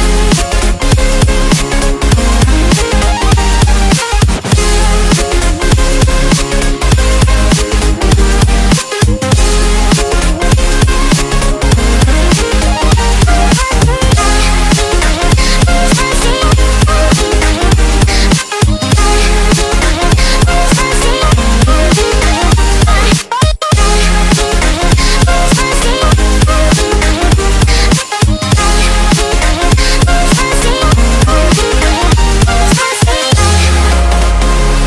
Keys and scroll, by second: 1.0 F7, 4.9 ctrl+space, 12.3 1, 14.9 2, 17.9 space, 18.7 l, 32.2 ctrl+l.